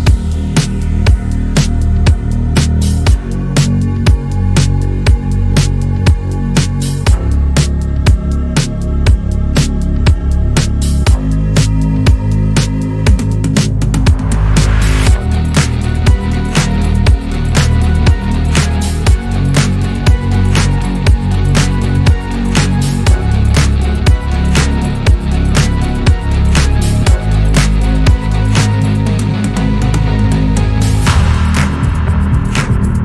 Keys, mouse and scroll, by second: 0.7 click, 1.2 shift+click, 1.7 shift+click, 2.3 click, 3.1-3.4 scroll down 1, 3.4 shift+middle click, 4.3 scroll up 1, 4.9 scroll up 3, 4.9 click, 5.6 click, 6.6 Tab, 7.0 scroll down 1, 7.3-7.9 scroll up 2, 7.9 Tab, 8.1-8.4 scroll up 1, 8.7 click, 9.1 shift+click, 9.9 s, 11.7 click, 12.6 s, 13.8 Tab, 13.9-14.4 scroll down 3, 14.4 shift+middle click, 14.9 scroll up 1, 15.3-16.3 shift+middle drag, 16.3 Tab, 16.9 click, 17.8-19.2 middle drag, 19.2 KP_7, 19.8 middle click, 20.5 KP_7, 21.2 shift+middle click, 22.0 click, 23.9-25.2 shift+middle drag, 25.2 ctrl+r, 27.7-29.4 shift+middle drag, 29.4 ctrl+r, 31.2 ctrl+r, 31.9 scroll down 1, 32.9 scroll up 2.